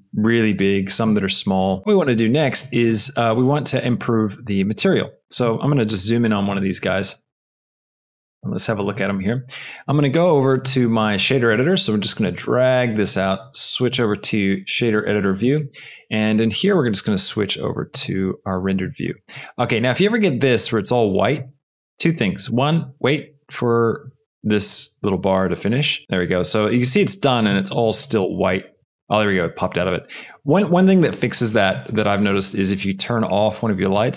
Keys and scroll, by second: 4.9 space, 8.4 shift+g.